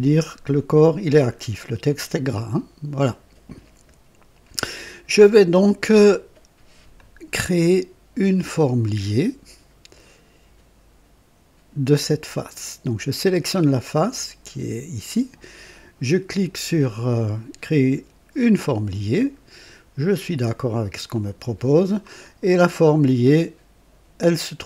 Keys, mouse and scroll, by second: 1.8 click, 6.9-8.7 drag, 8.8-9.9 right drag, 11.9 click, 18.4 click, 21.1 click, 22.3 scroll down 1.